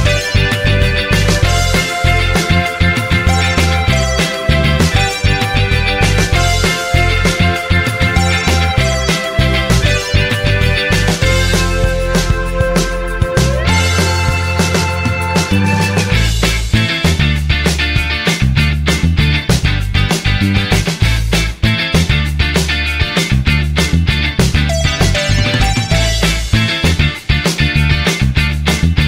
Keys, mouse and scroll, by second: 3.6 typing, 15.6 typing.